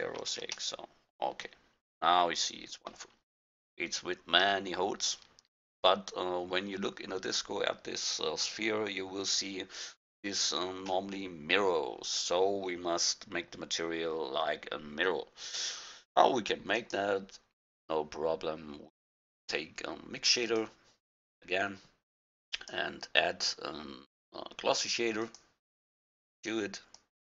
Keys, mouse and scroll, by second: 3.2-3.9 middle drag, 3.9-5.2 middle drag, 5.3 middle click, 5.5-7.0 drag, 14.7-15.8 drag, 16.8-17.3 middle drag, 17.3-18.8 drag, 22.6-24.4 drag, 27.0-27.3 drag.